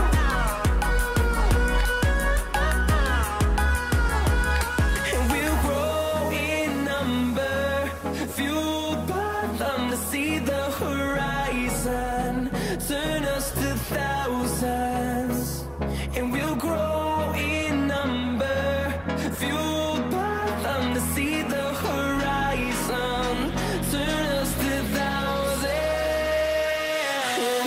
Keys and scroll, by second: 1.7 shift+a, 2.6 s, 3.2 s, 4.9 Tab.